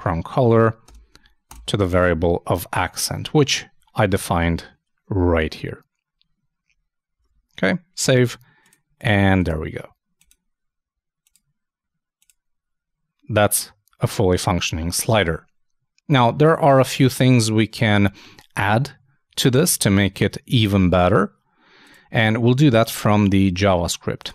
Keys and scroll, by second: 3.1 super+s, 7.2 super+Tab, 19.8 super+Tab.